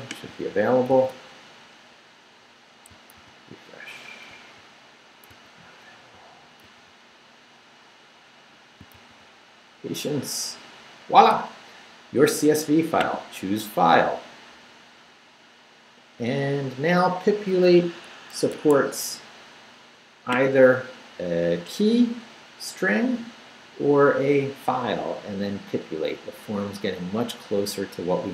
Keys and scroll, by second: 0.9 super+r, 3.2 super+r, 5.3 super+r, 6.6 super+r, 8.9 super+r, 18.9 Escape.